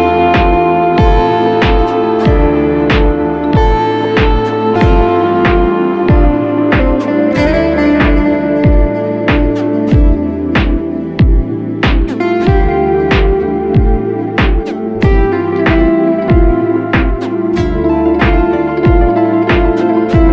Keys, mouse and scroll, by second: 1.1-2.3 ], 8.0-9.9 typing, 9.9 double click, 12.2 typing, 13.7-14.4 typing.